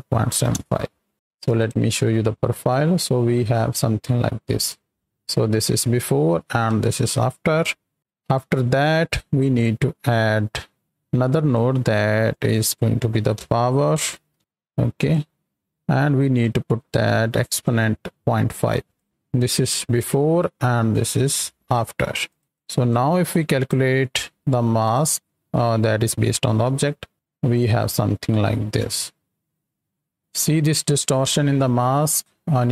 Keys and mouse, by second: 1.1 click, 1.6 ctrl+shift+click, 2.4 ctrl+click, 3.0 click, 4.5 click, 5.6 m, 6.7 m, 7.4 click, 8.0 right click, 9.1 middle click, 10.1-11.5 drag, 12.2 click, 15.0 drag, 16.4 click, 17.6-18.9 drag, 19.8 m, 21.3 m, 22.2 click, 22.5 click, 22.8 click, 24.8 ctrl+shift+click, 26.6 KP_7, 28.9-32.7 shift+drag.